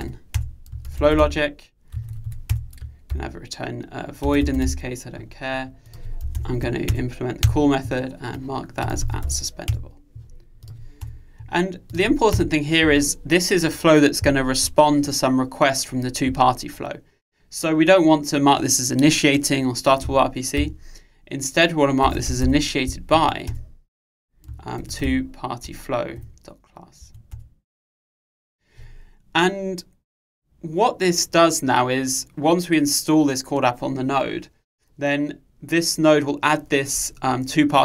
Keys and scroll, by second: 0.4 Return, 6.5 alt+Return, 23.6 Return.